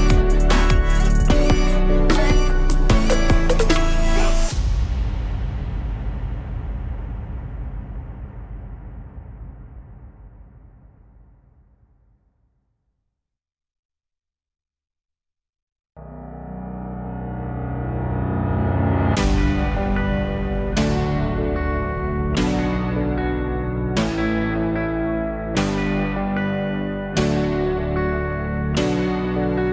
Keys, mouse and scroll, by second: 0.8 alt+click, 1.7 alt+click, 2.7-3.7 alt+drag, 4.3 alt+click, 5.3 alt+click, 6.5-9.6 alt+drag, 9.6-14.3 right drag, 14.3 alt+middle click, 14.6 alt+click, 16.5 click, 16.9 shift+click, 17.9 KP_1, 18.8 z, 20.7-22.2 alt+drag, 22.2 x, 25.1 click, 25.3 alt+shift+click, 25.5 alt+shift+click, 25.9 z, 26.6 scroll down 1, 26.8 alt+click, 27.6 f, 28.2-29.7 alt+drag.